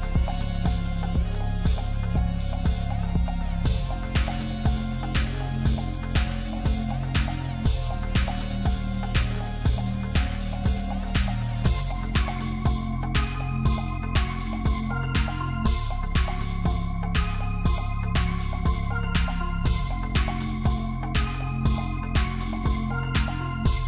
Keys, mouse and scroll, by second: 1.9-3.1 scroll down 2, 3.1 click, 3.9 click, 4.2-5.7 drag, 5.8 scroll up 1, 6.0-6.7 shift+middle drag, 6.7 g, 10.2-10.6 scroll up 7, 10.6-11.0 shift+middle drag, 11.0-12.0 scroll up 1, 12.0 g, 14.0-14.6 scroll down 7, 14.6-15.1 shift+middle drag, 15.1-15.5 scroll up 1, 15.5 click, 15.7-16.1 shift+middle drag, 16.1-16.7 scroll up 1, 17.0 shift+a, 18.7 r, 20.0 click, 20.4 click, 21.0 s, 22.2-22.5 shift+middle drag, 22.5-22.8 scroll up 7.